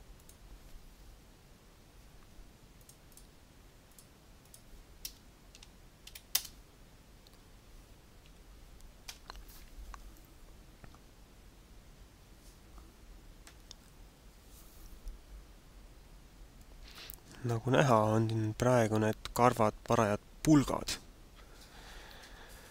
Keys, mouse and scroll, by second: 0.2 click, 3.1 click, 3.8 click, 4.4 click, 8.4 n.